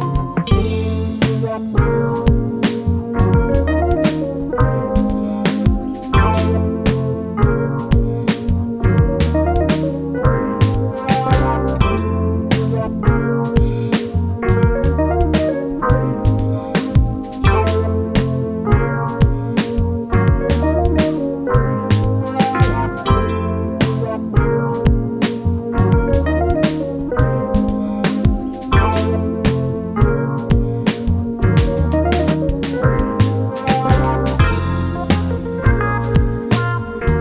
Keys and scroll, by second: 4.9 ctrl+z, 15.4 ctrl+z.